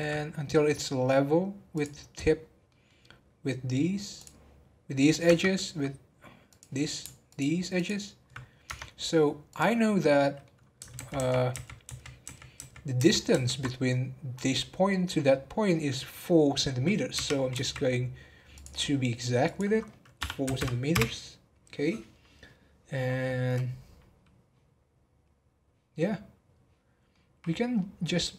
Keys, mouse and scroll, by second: 1.9 scroll up 1, 2.4 scroll down 2, 2.7-3.1 middle drag, 3.1-3.7 scroll down 1, 3.7-4.1 scroll down 2, 4.1 click, 4.6-5.2 scroll up 1, 5.2 Tab, 6.5 click, 7.7 alt+click, 8.4 scroll down 1, 8.6 Tab, 8.9-9.5 scroll down 1, 9.5 click, 9.9-10.6 middle drag, 10.6-10.9 scroll up 2, 10.9 ctrl+z, 11.1-13.0 ctrl+z, 13.7 scroll up 1, 14.3-16.4 middle drag, 16.4-17.1 scroll down 1, 17.1 g, 19.4-22.5 drag, 26.8 scroll down 2, 27.1 middle click, 27.7 scroll up 1, 28.1-28.3 middle drag.